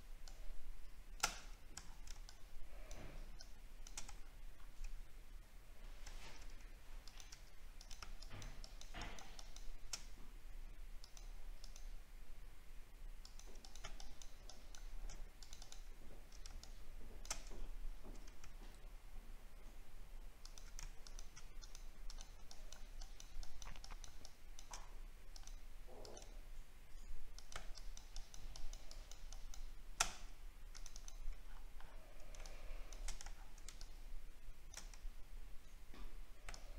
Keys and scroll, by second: 1.8 alt+scroll down 1, 4.2 alt+scroll up 4, 6.0 alt+scroll up 1, 16.0 alt+scroll down 1, 17.5 alt+scroll up 3, 31.4 alt+scroll down 1, 33.2 alt+scroll down 8.